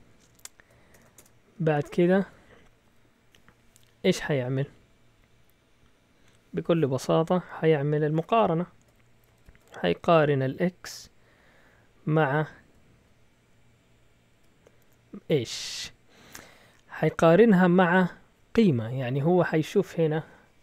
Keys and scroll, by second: 0.9-1.7 typing, 1.7 Return, 2.1 Up, 8.1 Tab, 9.3 (, 10.5 x, 14.3 &.